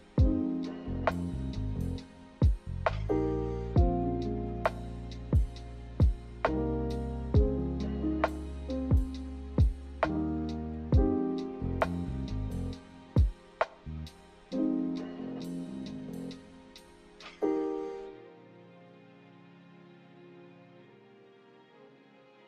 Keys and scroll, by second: 4.7-5.6 typing, 18.6 k.